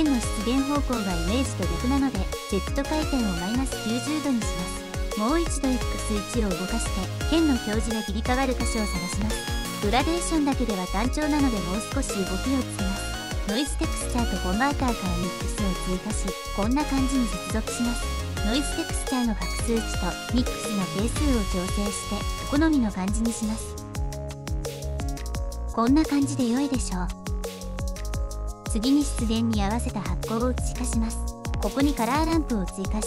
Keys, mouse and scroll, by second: 3.7 click, 5.5-10.7 drag, 11.8 shift+a, 14.6 shift+a, 16.8 click, 18.9 click, 19.0 middle click, 19.7-23.7 drag, 23.8 click, 24.9 middle click, 25.3-28.2 drag, 28.7 shift+a.